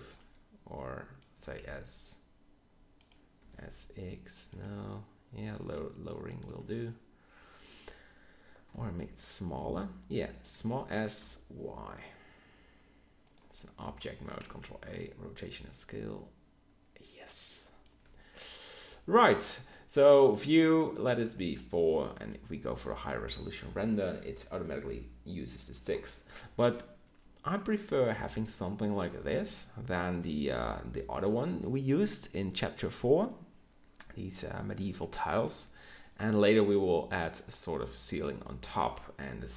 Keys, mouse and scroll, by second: 0.8 middle click, 1.3 s, 3.3 s, 6.9-8.6 drag, 8.6 s, 10.4 s, 14.4 ctrl+a, 21.9 middle click, 25.9-27.9 middle drag, 30.3 click, 39.0-39.5 middle drag.